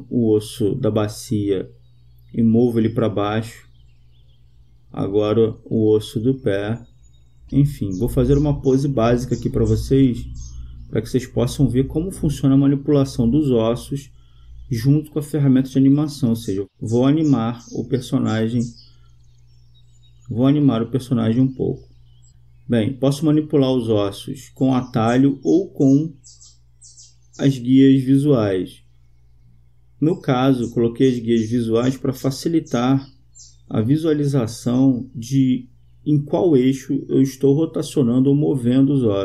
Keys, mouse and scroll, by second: 0.7-2.3 right drag, 1.8-3.5 drag, 4.8-6.4 right drag, 6.6-8.4 drag, 9.5-11.1 right drag, 10.8 click, 12.5 right click, 14.6-16.6 drag, 17.5 right click, 17.6 click, 24.2-25.8 right drag, 26.8 r, 34.8-36.7 drag, 37.7-39.2 drag.